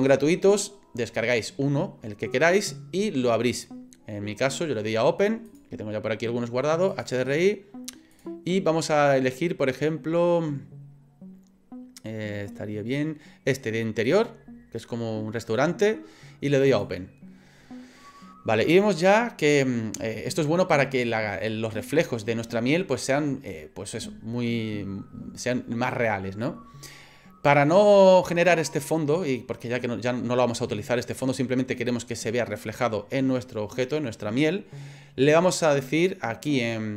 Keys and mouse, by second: 5.6-17.6 drag.